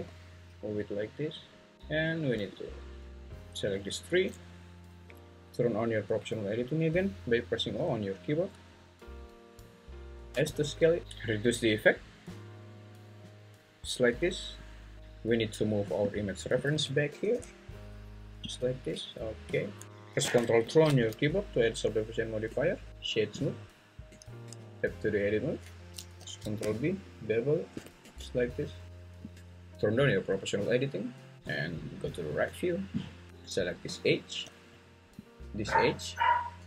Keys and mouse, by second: 2.5 click, 2.7-4.1 drag, 7.7 o, 10.3 s, 17.1 g, 17.3 y, 18.5-18.9 drag, 18.9 `, 20.7 ctrl+2, 22.5 Tab, 22.9-23.7 right drag, 24.1 Tab, 26.2 ctrl+b, 28.0 Tab, 29.2 Tab.